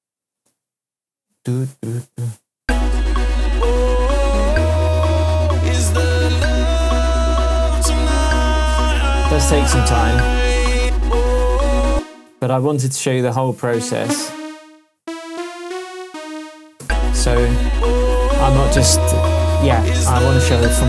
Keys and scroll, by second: 2.5 space, 11.9 space, 16.8 space.